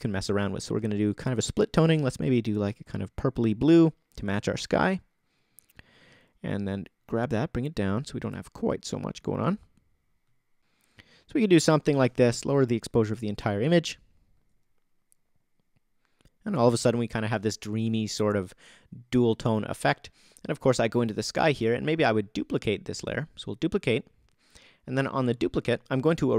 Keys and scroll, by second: 12.3 shift+-, 14.3 shift+=.